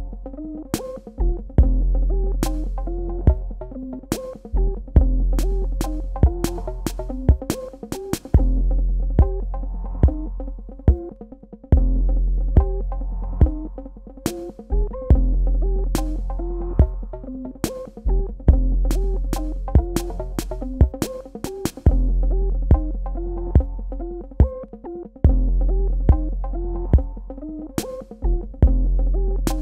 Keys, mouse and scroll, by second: 4.4 Delete, 5.8 space, 5.9 click, 8.4 Tab, 9.2 click, 12.6 right click, 14.2 click, 16.7 click, 20.2-21.3 scroll up 1, 21.3 scroll down 1, 21.4-23.2 scroll up 1, 23.2-23.8 scroll down 1, 23.8-24.1 scroll up 1, 26.8 super+KP_Add.